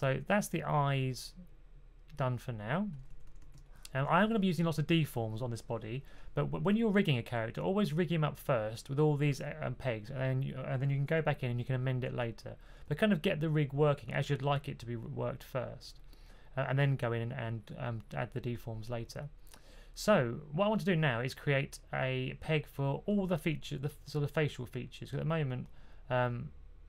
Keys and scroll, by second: 3.0 typing, 19.6 2.